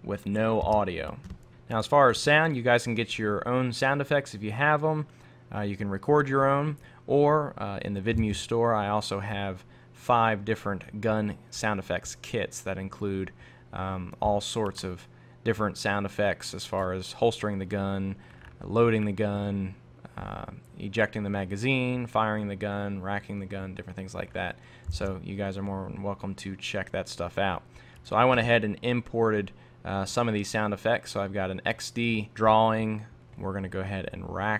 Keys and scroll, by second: 1.5 super+Tab, 8.2 super+Tab, 25.0 super+Tab, 32.3 super+z.